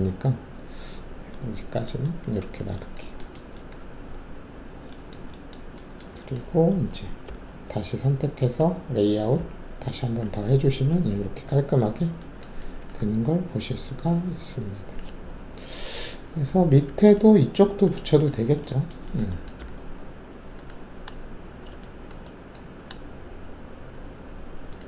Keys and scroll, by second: 3.9 alt+`, 7.2 alt+4, 9.3 z, 10.9 alt+`, 13.0 alt+`, 19.5 alt+2.